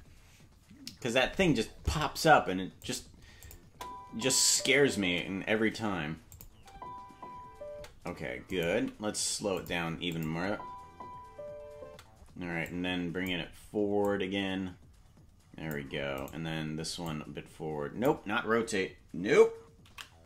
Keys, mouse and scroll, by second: 2.8 click, 3.4 click, 3.7 space, 6.3 click, 6.3 space, 6.5 space, 8.4 space, 8.5 right click, 8.7 g, 10.1 click, 10.3 space, 12.7 click, 12.7 space, 14.0 click, 16.3 right click, 17.0 click.